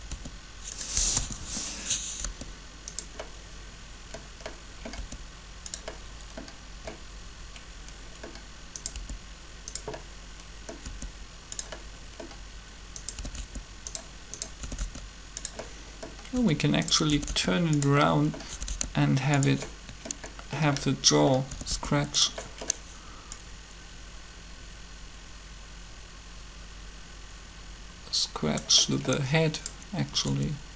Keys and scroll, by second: 0.0-1.0 typing, 2.2 r, 4.9 r, 8.9 r, 10.8 r, 13.2 typing, 14.6 typing, 18.5 typing, 21.5 typing, 30.2 typing.